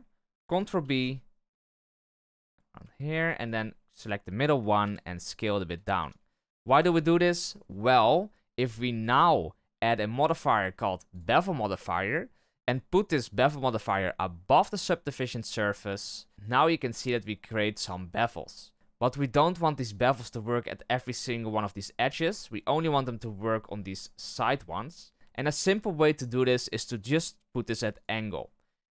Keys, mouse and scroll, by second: 0.8 ctrl+b, 3.4 alt+right click, 4.8 s, 5.9 Tab, 6.1-6.5 scroll down 1, 6.5 shift+middle drag, 6.8-7.4 scroll down 1, 7.4-7.9 scroll up 1, 8.9-12.1 drag, 13.1-14.7 drag, 16.3 click, 18.6 scroll up 1, 25.1-25.6 drag, 27.0-28.9 drag.